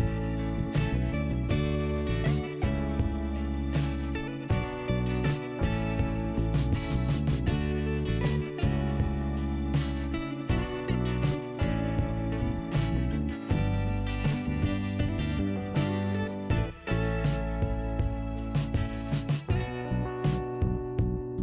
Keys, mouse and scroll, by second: 2.0 click, 2.2 click, 3.7 click, 7.0 click, 7.8 click, 7.9 click, 8.7 click, 10.3-11.3 scroll down 1, 11.3 scroll up 1, 11.8 click, 14.1 click, 17.0 click, 18.4 scroll down 1, 19.2 click, 20.3 scroll up 1.